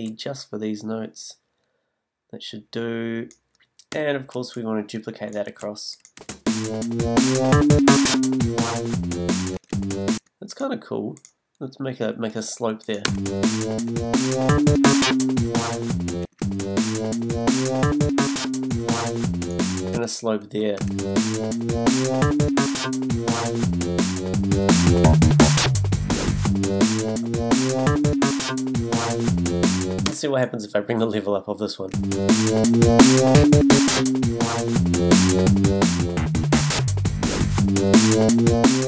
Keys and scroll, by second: 3.9 b, 5.5 super+d, 6.7 space, 9.5 space, 13.0 space, 16.2 space, 19.9 space, 30.1 space, 31.9 space.